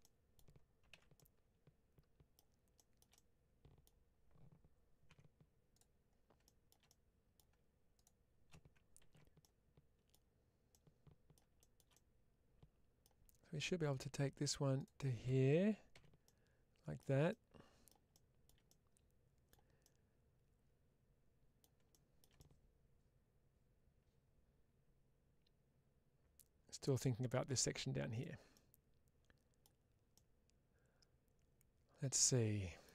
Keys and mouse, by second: 0.8 alt+z, 1.0-2.2 middle drag, 3.0 middle click, 5.0 2, 6.3 shift+middle click, 6.8 middle click, 8.9 ctrl+x, 9.3 middle click, 10.6 middle click, 11.9-12.9 middle drag, 15.8 f, 16.1 middle click, 17.2 middle click, 18.6 middle click, 19.7-21.5 middle drag, 22.2-26.8 middle drag, 28.0 click, 28.4-29.5 middle drag, 30.0-32.7 middle drag.